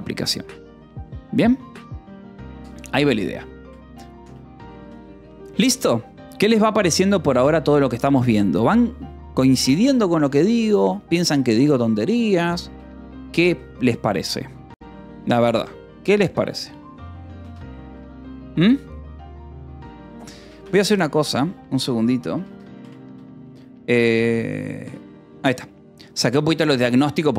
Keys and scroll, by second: 4.5 Return, 13.2 Escape, 17.5-18.3 typing, 20.3 Escape, 20.6 space, 20.8 d, 22.3 Escape, 22.7 space, 23.0 u, 24.7 d, 25.4 j, 26.0 k.